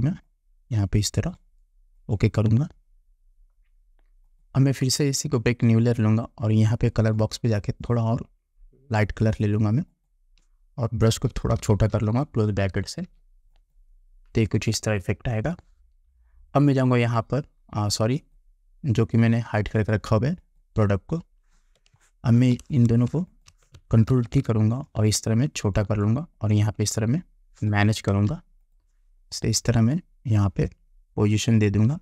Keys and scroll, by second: 11.2 [, 22.0 space, 24.2 ctrl+t, 28.2 Return.